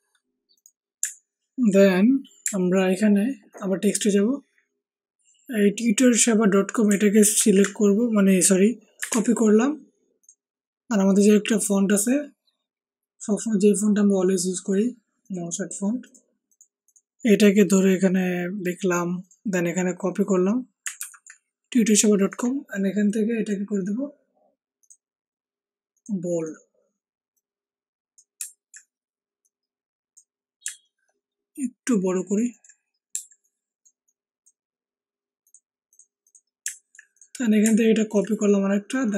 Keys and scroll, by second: 7.3 ctrl+c, 9.0 alt+Tab.